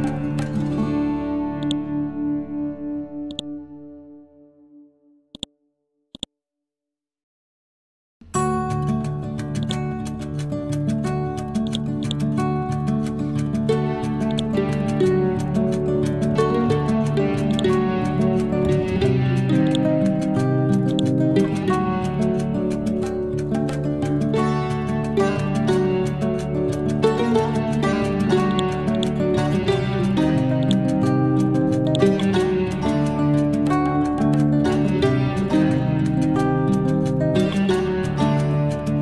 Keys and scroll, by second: 4.1 Delete, 19.2 b, 21.7 Up, 23.0 Down, 23.9 Up.